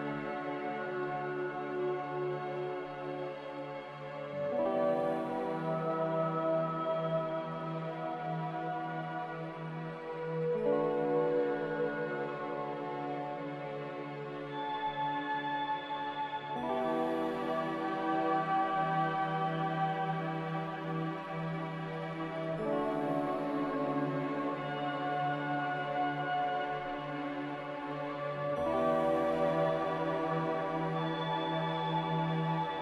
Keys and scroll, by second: 8.6 a, 16.7 ctrl+z, 30.1 ctrl+z.